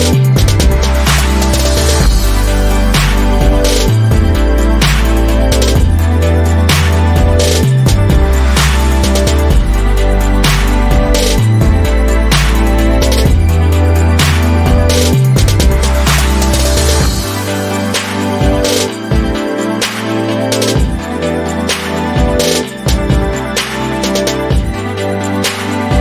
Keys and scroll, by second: 11.1 Right, 12.0 Right, 12.5 Right, 17.2 Right, 18.0 Left, 19.1 Left, 19.1 Right, 19.4 Down, 20.0 Down, 20.9 Down, 22.4 Down, 22.4 Up, 22.9 Up, 23.4 Left.